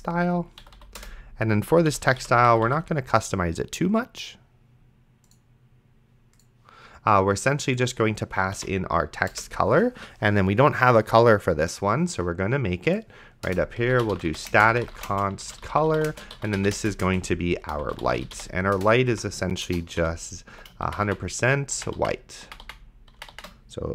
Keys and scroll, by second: 0.6 Down, 1.0 Return, 1.9 End, 2.2 ;, 2.5 Left, 8.6 o, 9.3 Return, 13.7-21.2 typing.